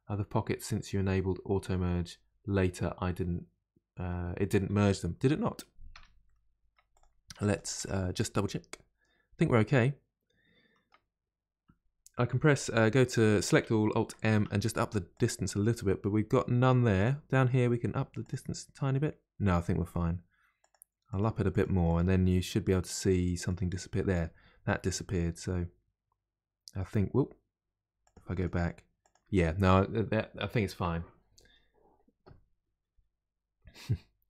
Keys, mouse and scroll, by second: 6.0 Tab, 6.2 middle click, 6.9 click, 7.3 Tab, 7.5 click, 7.8 Tab, 8.1-11.1 middle drag, 14.3 alt+m, 17.0 click, 18.2-19.5 drag, 20.6-23.9 drag, 28.0-29.3 drag.